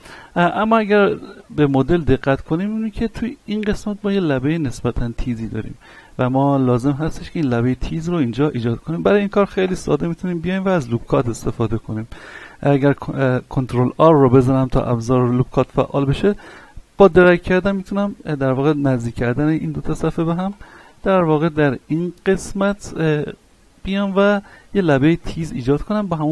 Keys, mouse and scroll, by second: 0.4 middle click, 1.5 z, 2.1 scroll up 1, 2.4 shift+middle click, 2.9 scroll up 1, 3.4 shift+middle click, 3.9-5.7 scroll up 1, 6.1-6.5 scroll down 1, 6.7-9.0 shift+middle drag, 9.0 right click, 9.6 Tab, 10.1 middle click, 10.9 z, 11.5-14.0 shift+middle drag, 14.0 ctrl+r, 16.9 click, 20.7 click, 20.7 Tab, 21.0-21.4 scroll down 1, 21.4-22.9 middle drag, 24.3-24.6 scroll down 1, 24.6 middle click, 25.1 a, 25.4-26.3 middle drag.